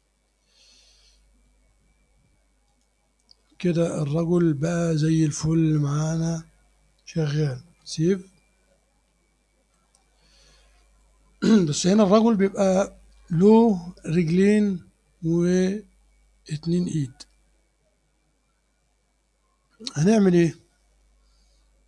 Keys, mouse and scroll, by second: 0.1 click, 0.7 scroll down 1, 1.1 click, 2.7 click, 3.5 click, 5.0 scroll up 1, 5.5-6.5 drag, 9.1 ctrl+s, 10.5 click.